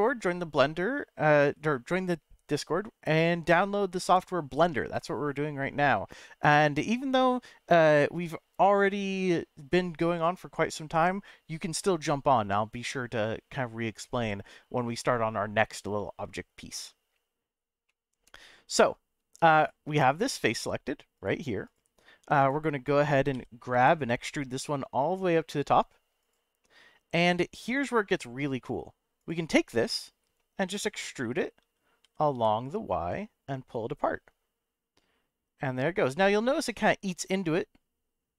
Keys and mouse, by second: 17.9 middle click, 19.6 click, 21.1 click, 22.5 click, 23.3 e, 23.7 z, 26.2 click, 26.6-28.5 middle drag, 29.7 middle click, 30.6 e, 30.9 z, 32.0 e, 32.3 y.